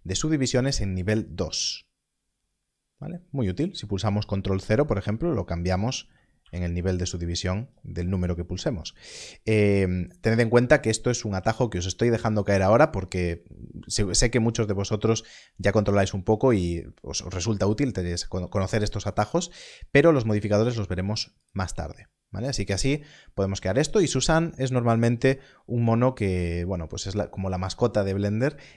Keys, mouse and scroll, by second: 4.6 ctrl+0, 5.6 ctrl+1.